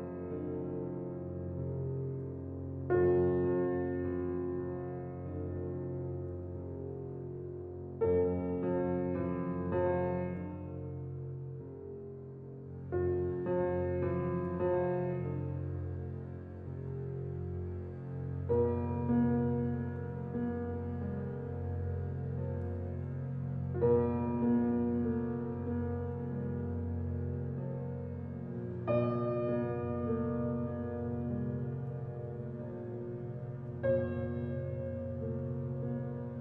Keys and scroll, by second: 23.8 ].